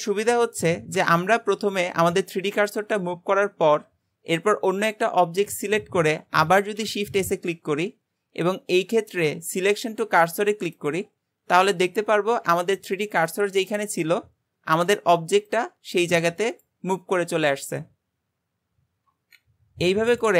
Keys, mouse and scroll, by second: 2.4-4.8 scroll down 1, 4.8 click, 5.3-6.6 scroll down 2, 6.6 shift+s, 11.7-19.4 scroll up 3, 19.5-20.2 scroll down 3, 20.2 click.